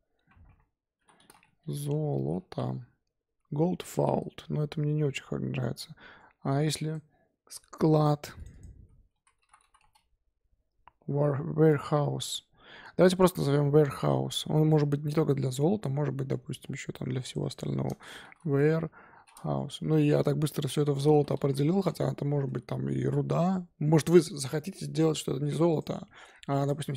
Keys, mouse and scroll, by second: 15.6-16.2 middle drag, 16.2-17.2 scroll down 7, 17.2 click, 17.4-20.5 drag, 25.7 click, 26.6 click.